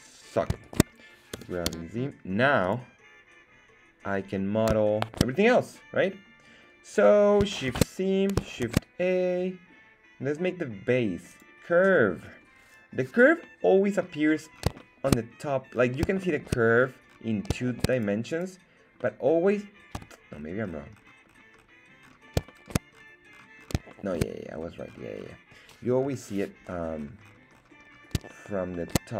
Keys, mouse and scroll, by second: 0.6 shift+right click, 1.3 g, 1.6 z, 2.6 click, 4.8 shift+middle drag, 7.7 shift+c, 8.6 shift+a, 13.4-14.0 middle drag, 14.2-14.7 scroll up 4, 14.8 shift+middle click, 15.4-15.7 scroll down 2, 15.7-16.2 scroll up 3, 16.2 shift+middle click, 16.7-17.5 scroll up 3, 18.0 right click, 18.4 right click, 19.0 middle click, 20.0 KP_1, 20.5 scroll down 2, 21.1-21.7 scroll down 7, 22.1 scroll down 1, 22.5 shift+middle click, 23.2-24.1 scroll up 5, 23.9 shift+middle click, 24.7 scroll down 1, 24.9-25.7 scroll up 2, 26.0 KP_7, 26.6 scroll up 2, 26.9-27.9 scroll down 7, 28.3 shift+middle drag, 28.8 shift+middle click, 29.0-29.1 shift+scroll up 4.